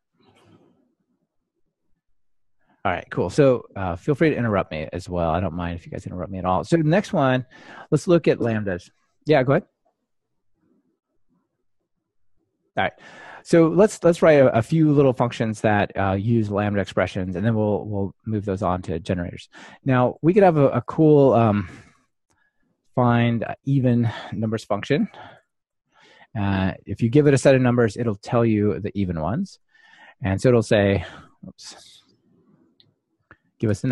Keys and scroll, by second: 8.0 ctrl+shift+r, 31.5 Escape.